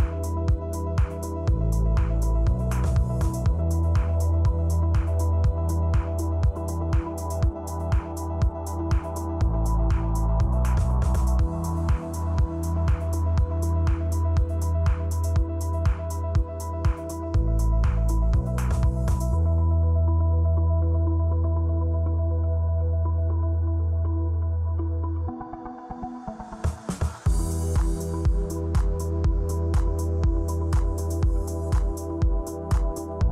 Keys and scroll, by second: 2.0 p, 19.4 super+z, 23.8 ↺, 24.2 space, 24.7 p, 24.9 space, 26.6 space.